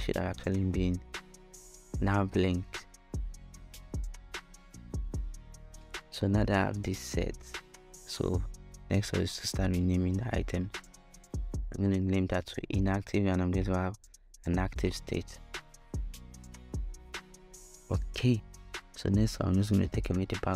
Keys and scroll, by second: 0.0-1.0 typing, 1.4 Return, 8.9-11.4 typing, 14.2-16.2 typing.